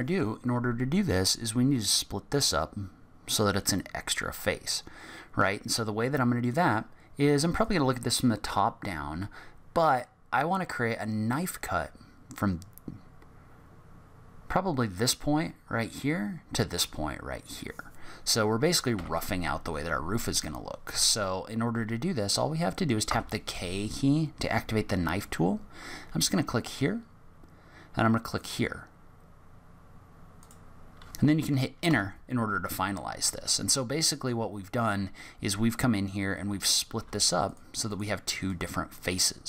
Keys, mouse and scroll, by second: 5.7-7.6 scroll up 1, 7.6 click, 18.9 k, 23.0 k, 33.4 middle click, 37.0 3, 37.4 click, 37.8 click, 38.4 click, 38.8 click.